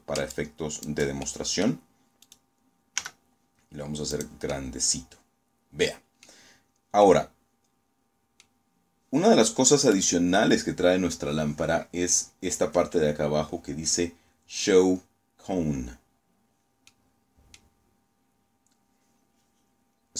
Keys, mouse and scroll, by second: 0.1 ctrl+middle click, 1.1 right click, 1.9 s, 3.0 click, 3.4-5.3 middle drag, 5.5 scroll down 2, 5.9-7.5 drag, 7.6 scroll up 1, 8.8 right click, 15.8-16.7 middle drag, 16.9 scroll up 2, 18.0-18.3 scroll down 2, 18.9 scroll down 2.